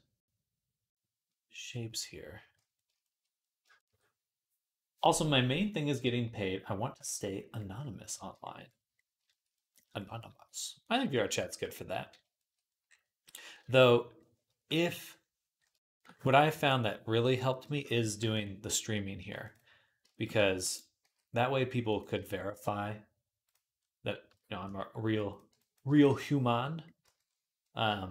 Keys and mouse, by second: 2.6-6.7 shift+drag, 8.5 middle click, 9.1 shift+middle click, 11.5-13.1 right drag, 13.1-17.9 drag, 14.7 KP_3, 16.3 s, 19.0 ctrl+r, 20.3 ctrl+r, 20.9 s, 24.1 shift+click, 24.3-25.9 drag, 24.5 z, 25.3 b, 25.9-28.1 middle drag, 26.8 z, 27.9 KP_Enter, 27.9 KP_Decimal.